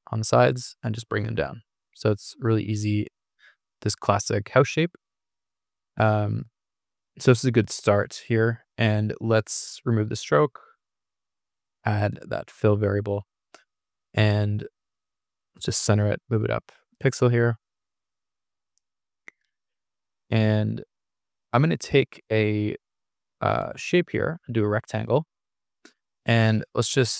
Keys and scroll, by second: 0.1 Down, 0.8 Down, 2.4 Down, 3.5 Escape, 18.0 Escape.